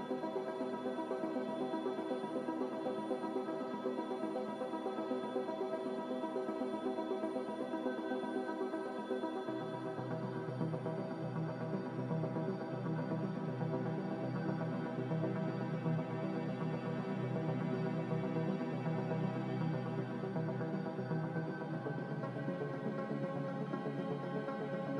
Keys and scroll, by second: 1.6-2.5 typing, 4.0-4.7 typing, 6.2 ctrl+z, 6.8 ctrl+z, 7.1 ctrl+z, 7.3 ctrl+z, 7.5 ctrl+z, 9.9 z, 11.6 2, 11.8 Return.